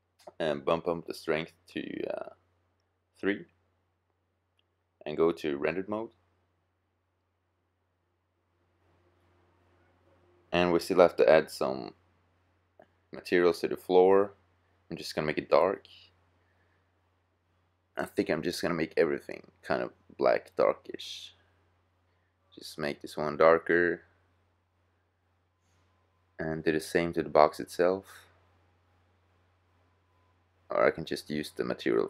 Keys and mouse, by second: 0.5-2.4 drag, 4.5-6.3 drag, 10.6-12.3 middle drag, 12.3 middle click, 13.8-15.6 drag, 18.7-20.4 middle drag, 22.6 middle click, 26.2-30.0 middle drag, 30.8 middle click, 30.9-32.0 drag.